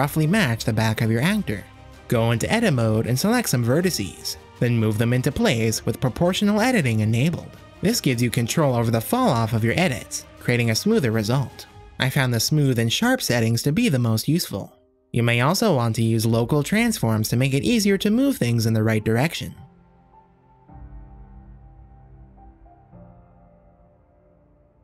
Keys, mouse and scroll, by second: 0.6 z, 2.4 Tab, 2.7 shift+click, 4.5 click, 5.2-6.8 drag, 6.9-7.8 drag, 8.0 shift+click, 8.5 g, 12.0 shift+click, 12.7 g, 15.4 shift+click, 16.0 click, 16.3 shift+click, 16.6 g, 19.6 click, 20.1 g, 21.3 click, 21.5 shift+middle click, 21.7 shift+click, 21.9 middle click, 22.1 KP_0, 22.3 g, 23.8 g, 24.4 z.